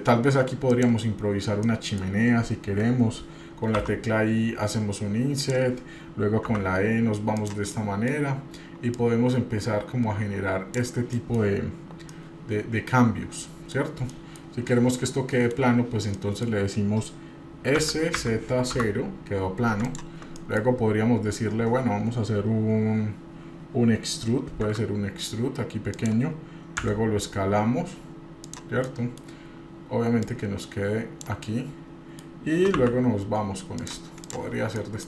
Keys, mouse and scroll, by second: 0.7 click, 1.6 middle click, 3.7 i, 6.5 e, 7.7 middle click, 8.9-10.8 drag, 11.1 middle click, 12.1-13.7 middle drag, 14.1 middle click, 14.5 scroll up 1, 15.0 shift+middle click, 16.1 middle click, 18.1 s, 20.4 middle click, 20.8-21.7 scroll up 2, 24.7 e, 27.1 s, 28.9 middle click, 30.2-31.3 drag, 31.4 middle click, 32.8 e, 34.2 click, 34.6 scroll down 2, 34.8 middle click.